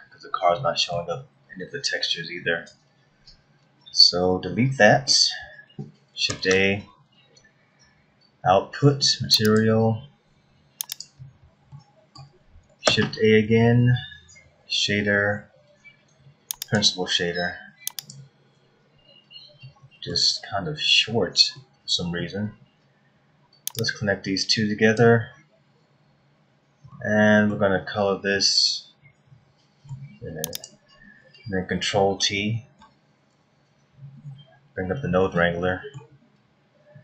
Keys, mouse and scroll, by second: 0.5 middle click, 2.1-3.2 scroll down 8, 5.0 Delete, 6.2 shift+a, 11.2-12.5 scroll up 6, 11.7 middle click, 12.8 shift+a, 18.7-19.6 scroll up 6, 19.6 middle click, 20.3-21.3 scroll up 6, 21.5 middle click, 23.7 click, 26.9 middle click, 28.3 middle click, 30.5 click, 32.7 ctrl+t, 34.4-35.7 scroll down 12, 35.7 middle click, 36.1-37.0 scroll up 6.